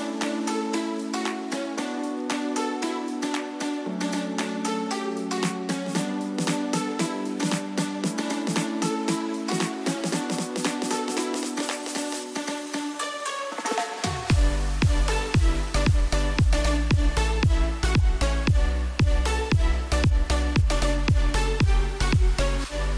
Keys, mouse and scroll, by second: 2.9 Right, 10.2 alt+Num_Lock, 10.3 alt+scroll up 1, 10.9-11.5 alt+scroll down 2, 11.7 alt+scroll up 1, 13.8 click, 17.3-22.1 drag.